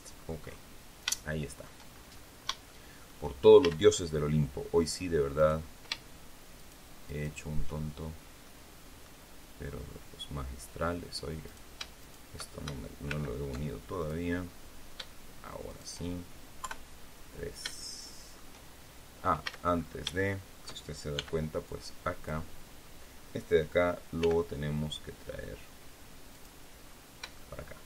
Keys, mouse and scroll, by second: 0.7 scroll down 3, 1.0 shift+middle click, 1.8-2.3 shift+scroll up 3, 2.6 shift+middle click, 3.5 shift+a, 5.3 right click, 6.5 shift+right click, 7.0 shift+right click, 8.3 click, 9.7-10.1 scroll up 2, 11.3 right click, 11.9 shift+right click, 12.9 alt+m, 13.9 click, 15.6 shift+right click, 16.5 KP_3, 17.0-17.4 scroll down 2, 17.6 shift+middle click, 19.3 a, 19.6-20.0 scroll up 3, 20.1 shift+middle click, 21.0 b, 21.6 click, 24.1 g, 26.2 click, 26.7-27.1 scroll down 2, 27.2 shift+middle click.